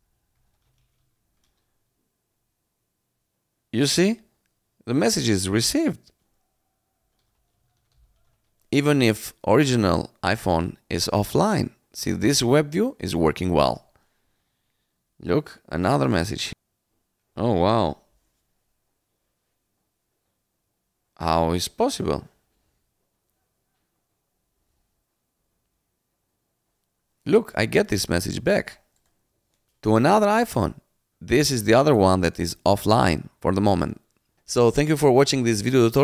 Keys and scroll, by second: 0.0-1.7 typing, 6.7-8.7 typing, 14.1 Return.